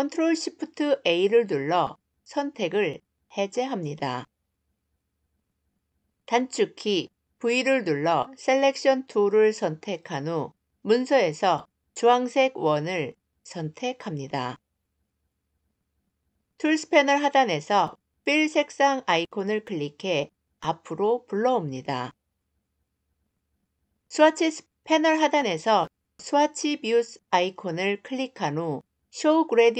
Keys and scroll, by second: 6.6 v.